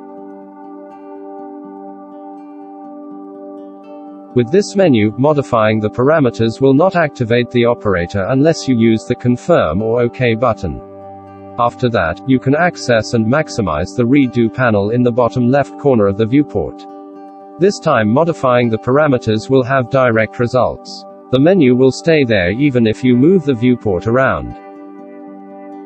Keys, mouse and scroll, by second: 12.9 middle click, 15.6 click, 17.0 shift+middle click, 17.4 middle click, 19.7-20.3 middle drag, 20.5 shift+middle click.